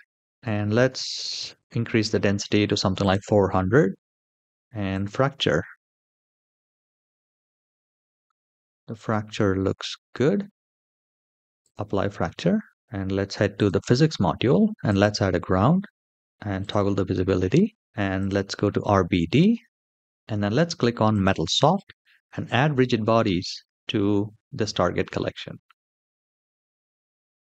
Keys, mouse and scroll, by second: 0.8 KP_0, 2.7 click, 3.5 scroll down 2, 4.7-7.1 drag, 7.6-8.0 scroll up 2, 8.0-10.4 middle drag, 11.3 click, 12.7 shift+middle click, 12.7-13.3 scroll down 2, 13.3 click, 14.6 click, 16.3 click, 17.9 click, 19.0-20.8 scroll down 1, 20.8 click, 20.8 scroll down 1, 23.1-23.9 scroll up 1, 23.9-25.0 scroll up 1, 25.0-26.2 scroll down 1, 26.2 scroll down 1, 26.3 click.